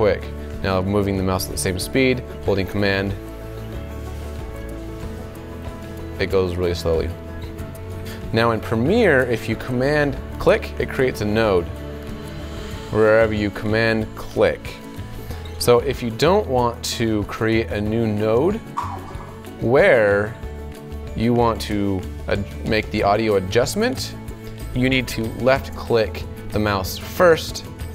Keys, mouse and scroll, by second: 15.6-27.9 super+drag.